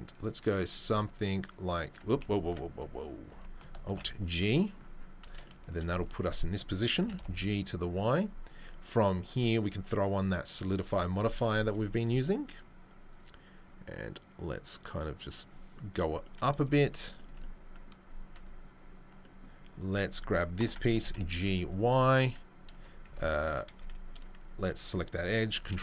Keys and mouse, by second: 2.2 ctrl+z, 3.3 Tab, 3.9 alt+g, 5.9 Tab, 6.2 a, 10.5-13.9 drag, 10.8 Tab, 13.9-19.8 right drag, 16.6 z, 18.3 Tab, 19.8-23.2 middle drag, 20.6 ctrl+l, 20.9 g, 22.7 2, 23.2 alt+click, 23.3-25.8 alt+middle drag, 23.7 z, 25.6 ctrl+b.